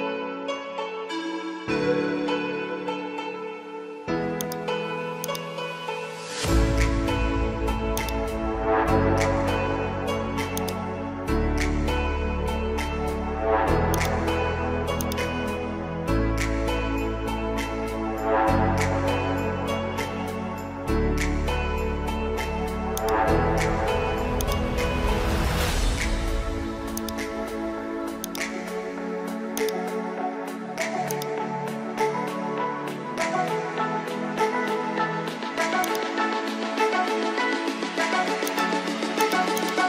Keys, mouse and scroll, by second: 4.4 alt+click, 5.3-7.4 drag, 18.4 typing, 21.9 typing, 23.0 click, 23.5 ctrl+t, 24.4-28.2 drag, 33.9 scroll down 1, 35.8-39.8 drag.